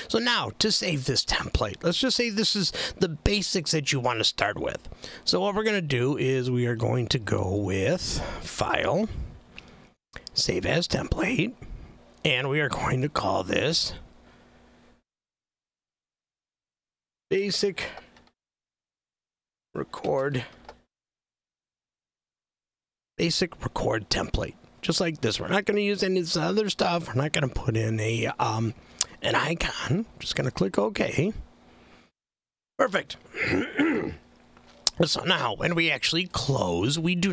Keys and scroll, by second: 16.2-23.3 typing.